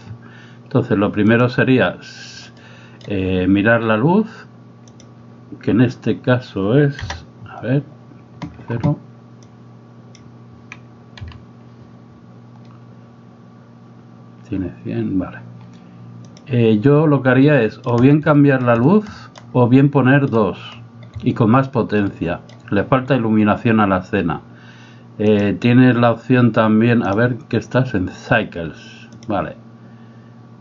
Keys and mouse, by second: 2.6 middle click, 7.0 KP_0, 9.5 click, 17.4 middle click, 18.4 middle click, 19.1 middle click, 19.9 middle click, 22.1 middle click, 25.3 click, 27.1-30.6 drag.